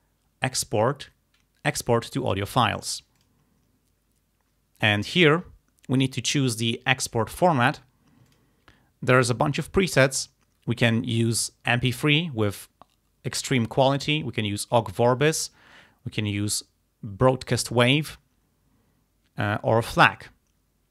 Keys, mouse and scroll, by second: 3.2 click, 8.3 click.